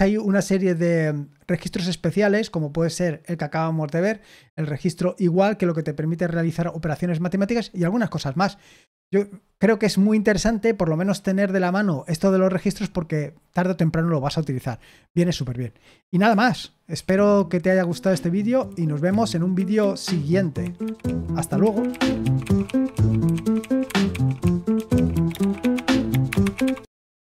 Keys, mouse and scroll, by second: 16.9 super+x.